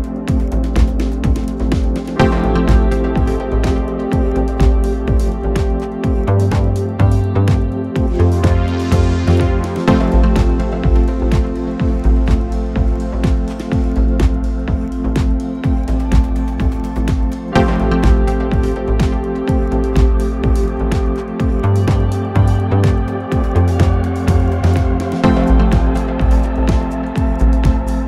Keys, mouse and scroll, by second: 12.2-14.1 drag, 26.3-27.4 middle drag, 27.4-28.0 drag, 27.8 middle click.